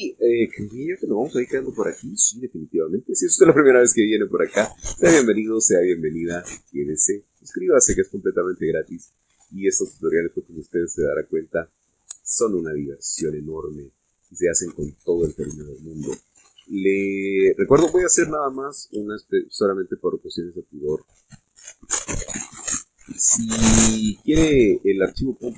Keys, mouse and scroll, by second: 0.5-1.1 scroll down 2, 1.3 scroll up 1, 2.3 click, 3.2 click, 4.0 scroll down 1, 4.5-5.8 middle drag, 6.4-6.9 scroll down 1, 7.1 shift+middle click, 14.1 click, 15.4-16.8 drag, 17.8 f, 18.4 click, 20.3-22.7 drag, 23.7-25.5 drag.